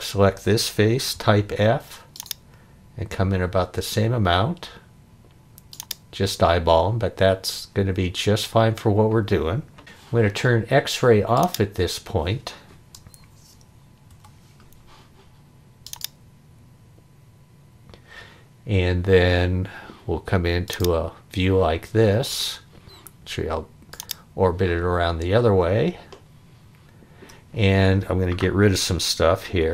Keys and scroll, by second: 1.1 f, 14.1 x, 29.6 e.